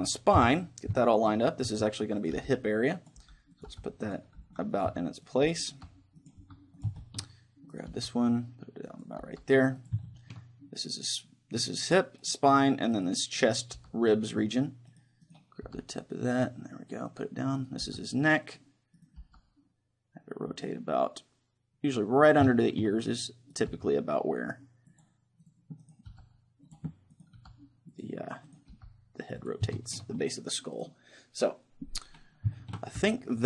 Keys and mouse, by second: 0.4 KP_3, 1.4 middle click, 1.7-6.4 typing, 2.3-8.6 drag, 7.0-8.7 middle drag, 7.7-9.0 right drag, 7.9 g, 9.3 g, 9.6-11.6 drag, 10.0-11.7 middle drag, 12.2-17.0 right drag, 13.8 g, 15.6 g, 17.2-19.2 drag, 17.6-19.2 right drag, 17.8 g, 19.2 g, 20.3 click, 22.4-23.5 drag, 22.6 middle click, 23.7 g, 24.3 right click, 26.1 g, 27.4 g, 28.8-31.8 drag, 28.8-31.0 right drag, 28.8 g, 29.8-31.0 middle drag, 32.6-33.4 middle drag, 33.0 Tab.